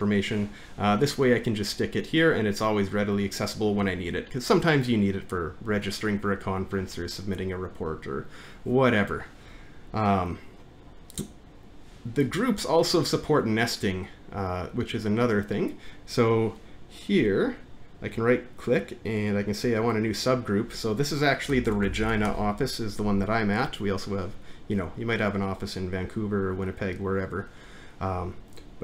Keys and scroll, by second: 21.4-22.8 typing.